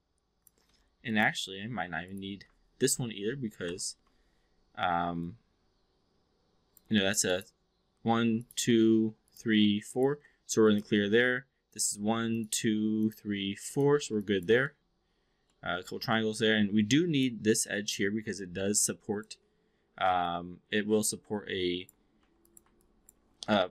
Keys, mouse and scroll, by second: 0.7 w, 1.0 click, 1.7 2, 2.1 click, 3.5 ctrl+BackSpace, 5.3-6.8 alt+drag, 8.3 shift+click, 9.3 shift+click, 9.8 shift+click, 12.2 shift+click, 13.5 shift+click, 14.1-14.5 alt+drag, 14.7 alt+middle click, 15.5 alt+middle click, 15.9-17.3 alt+drag, 18.4-19.3 alt+drag, 20.1-22.0 alt+drag, 22.1 1, 22.4 click, 22.7-23.1 alt+drag.